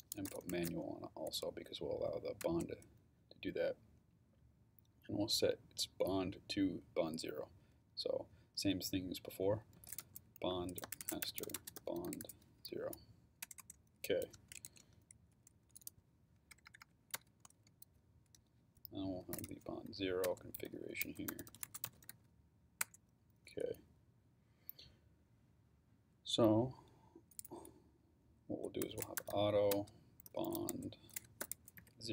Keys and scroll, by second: 0.0-1.2 typing, 2.4 Return, 9.2-13.1 typing, 13.4 Return, 14.5 shift+Return, 14.7-17.1 typing, 18.4-22.6 typing, 22.8 Return, 28.6-32.1 typing.